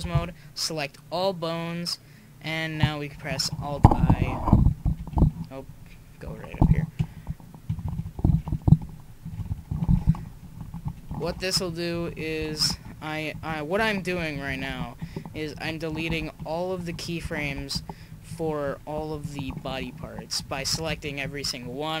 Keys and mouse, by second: 0.1 a, 1.2 click, 3.7 alt+i, 5.0 alt+i, 6.5 alt+i, 7.7 Left, 8.3 alt+i, 8.8 Return, 9.2 Left, 9.9 alt+i, 10.6 Left, 10.7 Left, 11.2 alt+i, 11.9 Left, 12.1 Left, 12.2 Left, 12.6 alt+i, 13.3 Left, 13.5 Left, 14.4 Left, 14.7 alt+i, 15.4 Left, 15.6 Left, 15.7 Left, 16.1 alt+i, 16.8 Left, 16.9 Left, 17.4 alt+i, 18.1 Left, 18.3 Left, 18.5 Left, 18.6 Left, 19.2 Left, 19.7 alt+i, 20.4 Left, 20.5 Left, 20.7 Left, 20.9 Left, 21.0 Left, 21.2 Left, 21.4 Left.